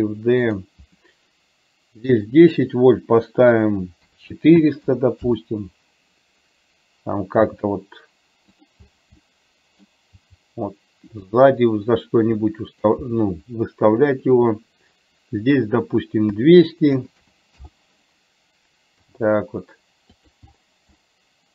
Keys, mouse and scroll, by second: 2.3-5.4 drag, 4.9 KP_0, 7.5 g, 9.4 middle click, 10.3 g, 12.5 middle click, 14.2 click, 15.4-17.7 drag, 17.3 KP_0, 19.0 g, 21.0-21.5 middle drag.